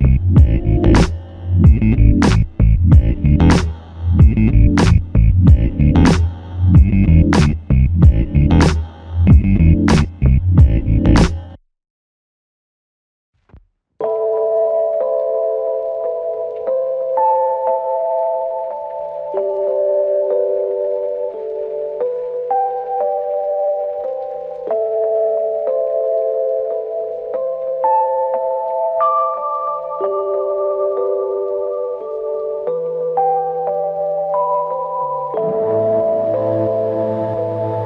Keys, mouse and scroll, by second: 6.1 double click, 7.6 ctrl+alt+click, 14.0 typing, 15.3 alt+click, 16.4 alt+click, 19.5 double click, 20.4 alt+click, 23.6 typing, 25.7 alt+click, 27.9 double click, 29.4 alt+click, 30.8 alt+shift+click, 37.1 typing.